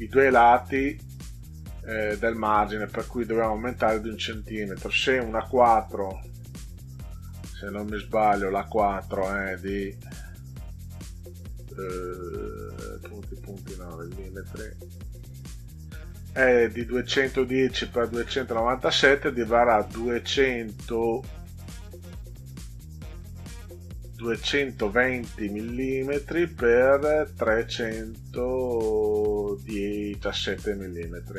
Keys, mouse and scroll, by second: 6.2 click, 9.4 click, 13.2 click, 15.1 click.